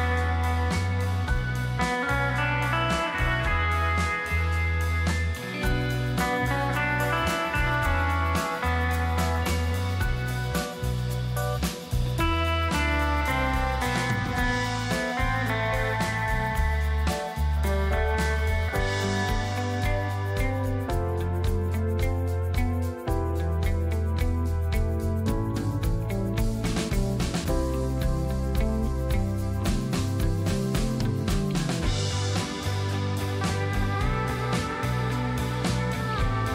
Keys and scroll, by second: 4.4 ctrl+shift+], 13.0 alt+space, 22.8 space.